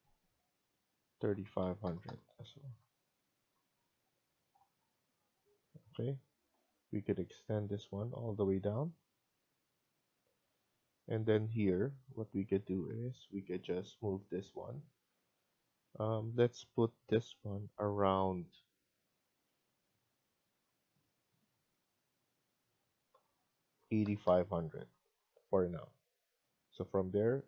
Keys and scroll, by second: 1.7-2.5 typing, 3.4 Escape, 3.6 Escape, 10.3 Escape, 23.9-24.6 typing, 25.2 Escape, 25.6 Escape.